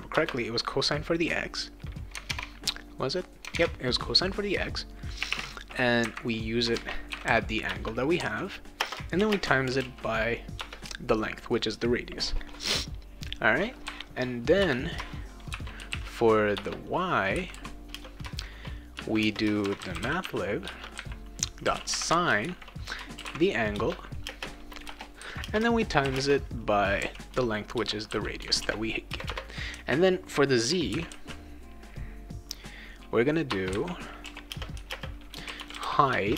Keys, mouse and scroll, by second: 0.1 Return, 2.3 alt+Tab, 3.6 Tab, 5.0-10.3 typing, 10.6 Return, 14.5 Return, 15.3-17.9 typing, 16.5 Return, 18.9-27.3 typing, 28.6 ctrl+s, 29.1 Return, 30.9 shift+n, 31.2 p, 33.5 Return, 34.2-36.3 typing.